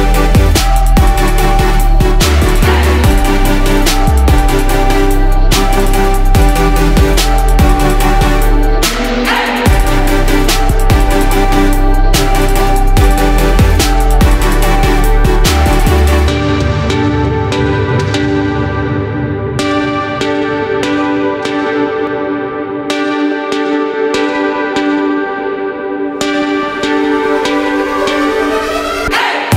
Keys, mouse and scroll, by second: 0.2 click, 0.9 F4, 1.9-3.9 drag, 5.9 F4, 6.4 click, 6.7 F4, 7.9 click, 8.3 F4, 9.1 click, 12.8 F4, 13.5 click, 13.8 F4, 14.5 click, 14.9 F4, 15.8-16.9 drag, 19.8 F4, 20.4 click, 20.6 F4, 21.4 click, 21.8 F4, 23.2-26.5 drag, 27.0 ctrl+g, 28.8-29.5 drag.